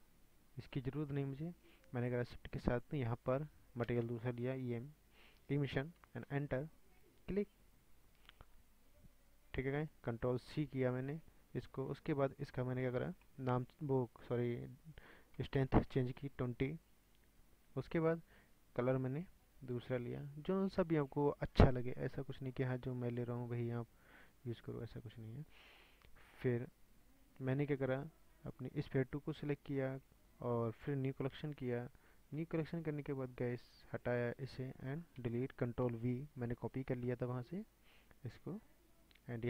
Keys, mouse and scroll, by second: 0.0 click, 0.8 Delete, 9.9-19.6 drag, 27.6 scroll down 4, 29.0 click, 31.3-34.1 drag, 34.5 drag, 35.2 Delete, 36.3 ctrl+v, 38.6 click.